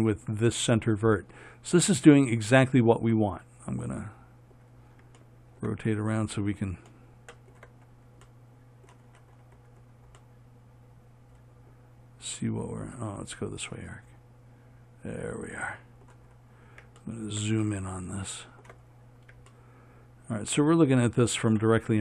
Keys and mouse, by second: 7.4-12.6 middle drag.